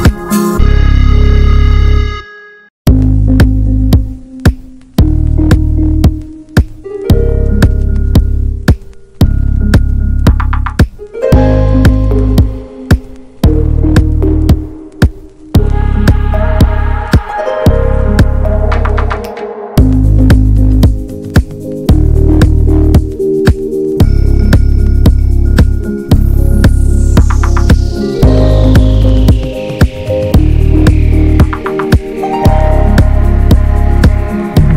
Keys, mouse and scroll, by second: 0.1 click, 0.7 ctrl+a, 1.1 ctrl+s, 1.5 n, 2.3 click, 3.0 Tab, 3.7 Tab, 4.0 ctrl+s, 4.5 click, 4.7 alt+z, 5.3 click, 6.1 alt+z, 6.4 click, 6.7 scroll down 2, 6.9 ctrl+s, 7.3 n, 7.4-7.7 scroll up 1, 7.7 click, 8.1 Tab, 8.3 middle click, 9.3 alt+z, 9.5 alt+middle click, 10.4 alt+middle click, 10.7-11.8 scroll up 4, 11.8 scroll up 1, 11.9 middle click, 12.4 scroll down 1, 12.5 middle click, 12.8 alt+z, 13.0 scroll down 3, 13.2 Tab, 13.4 alt+middle click, 13.9 alt+middle click, 14.2 click, 14.3 scroll down 1, 14.5 shift+middle click, 15.1 ctrl+s, 15.4 ctrl+s, 15.6 click, 15.8-16.8 shift+middle drag, 16.8 click, 17.2 ctrl+a, 17.5 middle click, 17.7 ctrl+s, 18.0 `, 18.2 click, 18.4 alt+middle click, 18.6 alt+middle click, 18.7 scroll up 1, 19.0 ctrl+s, 19.1 click, 19.2 Tab, 19.4 scroll up 1, 19.7 a, 20.0 shift+middle click, 20.2 alt+z, 20.5 click, 20.9 l, 21.4 alt+z, 21.5 scroll up 2, 21.7 shift+middle click, 21.9 s, 24.0-24.6 scroll down 4, 24.2 Tab, 24.3 click, 24.6 shift+middle click, 24.8-25.6 scroll up 2, 24.9 Tab, 25.6 click, 26.4 ctrl+z, 26.7 click, 27.3 ctrl+z, 27.6 click, 27.9 scroll down 3, 28.1 Tab, 28.2 click, 28.5 middle click, 28.7 scroll down 1, 28.8 shift+middle click, 29.3 click, 29.8 click, 30.1 ctrl+a, 30.9 click, 31.1-33.3 shift+middle drag, 33.3 ctrl+s, 33.5 middle click, 33.8 ctrl+s.